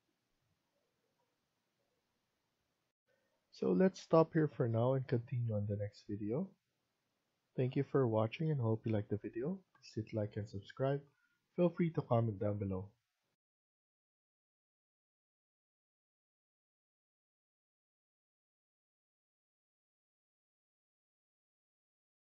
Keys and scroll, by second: 2.7 F1, 13.2 F2.